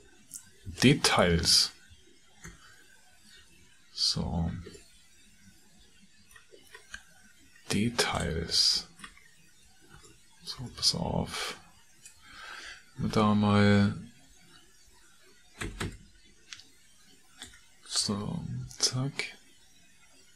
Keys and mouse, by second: 0.2 ctrl+click, 0.4 ctrl+middle click, 0.6 ctrl+click, 2.5 KP_Decimal, 4.8-6.4 middle drag, 10.0 ctrl+middle click, 13.0 Tab, 15.6 a, 16.1 a, 17.4 3, 18.7 l.